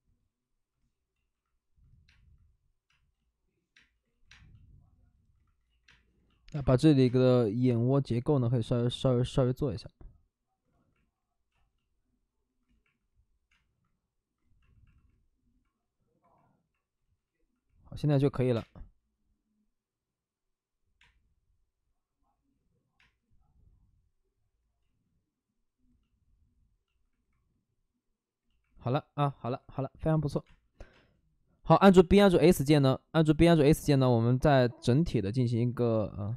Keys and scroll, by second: 1.1 ctrl+z, 1.9-4.3 typing, 2.0 ctrl+z, 4.0 ctrl+z, 5.6 ctrl+z, 5.8 space, 13.5 space, 16.9 ctrl+z, 18.5 space, 18.5 3, 20.9 space, 23.0 space, 24.8 ctrl+z, 24.8 space, 30.4-32.6 typing, 35.7-36.3 typing.